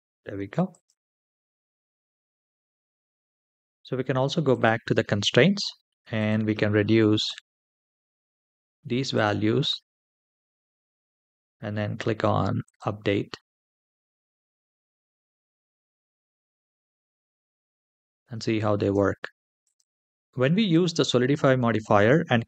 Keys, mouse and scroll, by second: 0.5 click, 1.5-1.9 middle drag, 2.3-2.7 shift+middle drag, 3.2-4.3 scroll up 2, 4.3 click, 5.0-5.9 scroll down 2, 5.9-7.3 drag, 8.9-10.5 drag, 11.2-12.1 scroll down 1, 12.1 scroll down 1, 12.4 click, 13.4-14.1 middle drag, 14.5 space, 18.5 space, 19.4 click, 20.1 shift+middle click, 20.1-20.9 scroll up 1, 20.1 space.